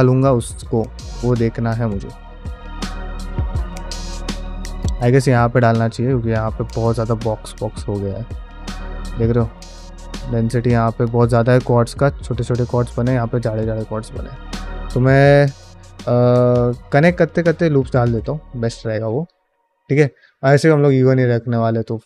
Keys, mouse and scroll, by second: 0.4 shift+middle click, 0.8 middle click, 1.1 shift+middle click, 1.6-3.5 middle drag, 3.7 middle click, 4.1 middle click, 4.5 middle click, 5.8 middle click, 6.7-10.5 middle drag, 10.9 middle click, 11.7 middle click, 12.4 middle click, 13.4 middle click, 13.9 shift+middle click, 14.2 middle click, 14.9 ctrl+r, 16.3 shift+middle click, 16.6 ctrl+middle click, 17.0 middle click, 17.3 ctrl+middle click, 17.6 shift+middle click, 17.9 ctrl+Tab, 19.1 drag, 19.7 ctrl+middle click.